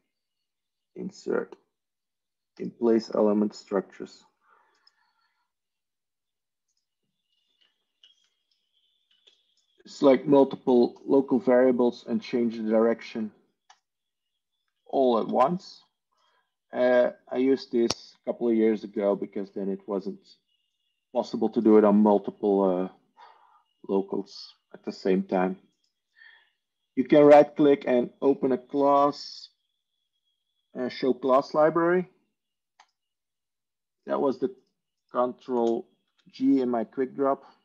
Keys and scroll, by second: 12.4 Tab, 15.2 ctrl+z, 35.6 ctrl+space, 36.4 ctrl+g.